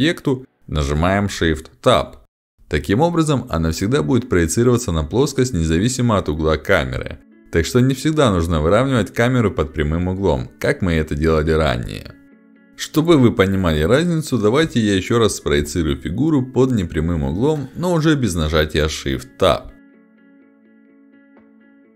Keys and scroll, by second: 2.5 space, 8.1 space, 10.5 ctrl+z, 14.6 ctrl+alt+x, 16.8 h, 21.6 space.